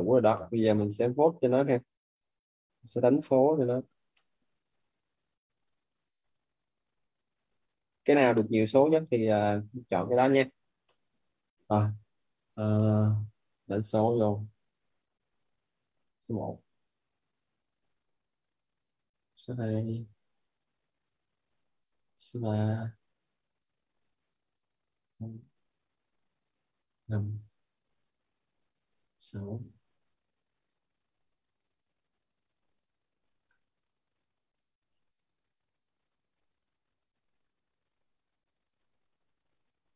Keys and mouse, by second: 0.7 middle click, 2.8 click, 4.0 middle click, 5.7 click, 8.1 middle click, 15.1 ctrl+n, 16.0 1, 16.8 click, 18.7 ctrl+n, 19.1 2, 20.5 click, 21.4 ctrl+n, 22.0 3, 23.4 click, 24.4 ctrl+n, 24.7 4, 25.3 click, 26.2 ctrl+n, 26.7 5, 27.3 click, 28.5 ctrl+n, 28.9 6, 29.6 click, 30.8 ctrl+n, 31.3 7, 31.8 click, 32.7 ctrl+n, 33.1 8, 34.9 click, 35.9 ctrl+n, 37.0 9, 37.7 click, 38.6 ctrl+n, 39.2 1, 39.6 0.